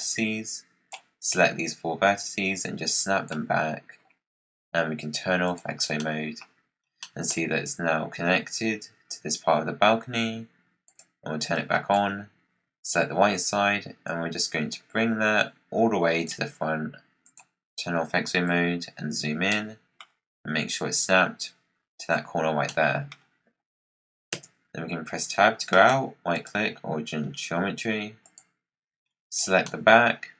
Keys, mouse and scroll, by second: 2.1 click, 5.4 click, 5.9 middle click, 6.4-6.9 scroll down 6, 6.9-9.9 middle drag, 10.7 click, 12.5-13.4 scroll down 8, 14.0 click, 17.1-18.4 drag, 18.4 KP_Decimal, 19.4-22.4 middle drag, 22.6 middle click, 23.1-24.2 scroll down 9, 24.2 Tab, 25.6 right click, 26.6-27.3 scroll down 11, 28.1 click, 28.6-29.6 scroll up 15, 29.6-30.1 middle drag, 30.1-30.3 scroll down 1.